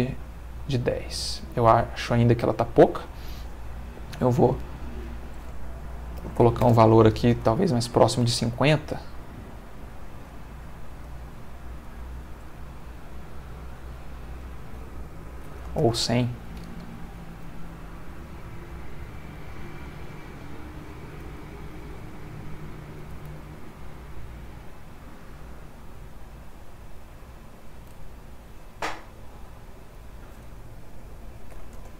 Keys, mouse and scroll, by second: 2.8 Escape, 4.1 click, 5.0 click, 6.1 5, 6.3 0, 6.6 Return, 7.3 space, 11.0 click, 11.8 click, 12.8 click, 14.5 ctrl+click, 15.3 1, 15.4 0, 15.8 Return, 17.4 g, 19.3 click, 21.7 g, 23.0 click, 23.3 r, 27.3 click, 29.9 click, 31.5 1, 31.8 Return.